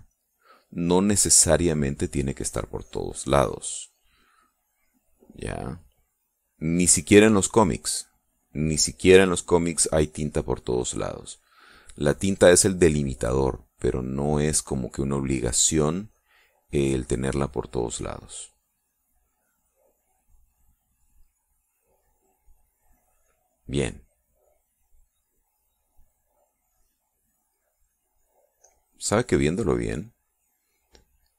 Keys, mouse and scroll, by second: 0.6-2.8 drag, 2.9-5.8 drag, 5.9 click, 6.8-10.4 drag, 11.3-14.9 drag, 16.3-19.5 drag, 20.0-21.6 drag, 22.0 middle click, 23.1 middle click, 28.0-31.2 drag.